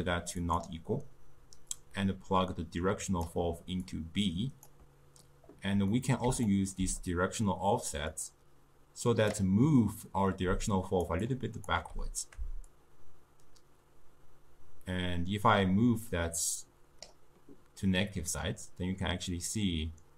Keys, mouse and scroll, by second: 3.9 click, 6.0-8.2 middle drag, 8.2 click, 10.6 d, 10.8 click, 11.1 d, 11.2 d, 11.4 click, 11.7 d, 12.8-15.9 shift+drag.